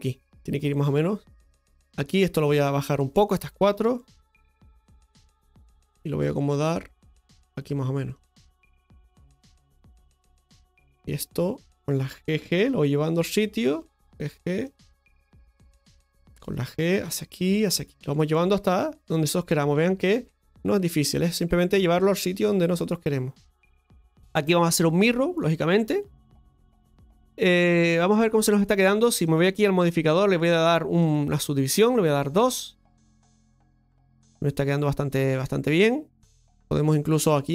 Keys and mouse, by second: 2.1 shift+right click, 2.6 shift+right click, 3.6 shift+right click, 4.1 shift+right click, 4.7-7.5 drag, 8.2-10.3 drag, 11.0 right click, 13.8 right click, 14.6 g, 16.9 g, 17.5 right click, 18.5 g, 19.1 right click, 20.0 g, 21.9 right click, 21.9 g, 22.0 g, 23.4 right click, 26.2 middle click, 28.0 middle click, 32.5-33.5 drag, 33.5 Tab, 33.9-36.8 middle drag, 37.2 Tab.